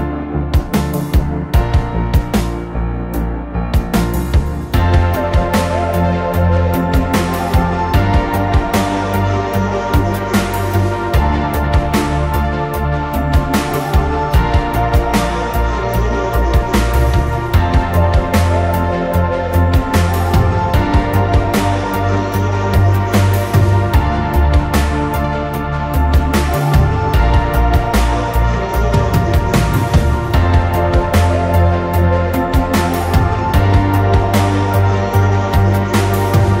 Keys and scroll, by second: 2.5 v.